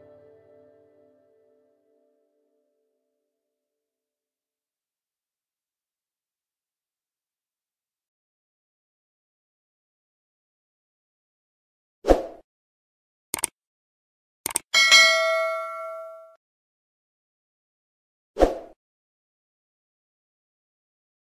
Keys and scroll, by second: 4.6 t, 4.7 space.